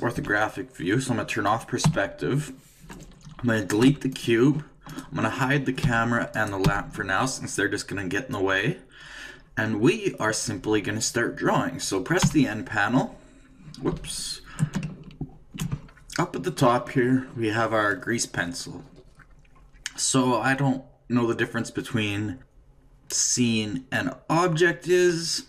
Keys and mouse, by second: 0.2 KP_3, 1.8 KP_5, 3.8 x, 4.9-8.1 right drag, 5.8 h, 6.6 h, 8.3-12.2 middle drag, 12.2 n, 13.0-14.8 middle drag, 17.5 shift+middle click.